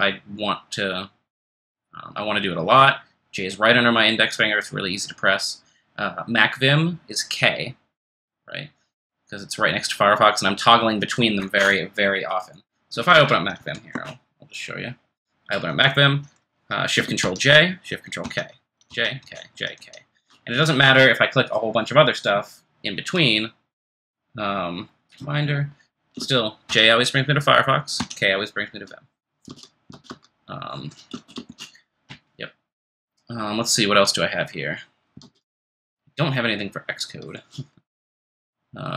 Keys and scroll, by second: 13.6 m, 13.9 Return, 29.5 super+Tab, 29.9 super+Tab, 30.7 super+Tab, 35.2 super+Tab, 37.3 super+Escape.